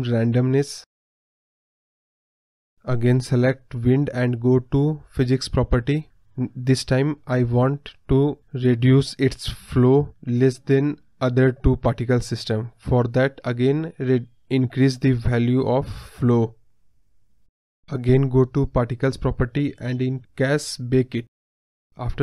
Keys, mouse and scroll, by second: 0.0 KP_0, 1.5-2.3 drag, 2.3 scroll up 1, 2.4 middle click, 2.5 scroll down 2, 2.7-3.3 middle drag, 3.3 click, 3.7 click, 4.6-9.0 middle drag, 9.0 space, 9.3-10.8 middle drag, 10.8 click, 12.6-14.6 drag, 14.6 scroll down 1, 14.6 middle click, 15.6 click, 16.1 middle click, 16.3 scroll up 1, 16.5 middle click, 17.4 space, 18.4 click, 21.6-22.2 drag.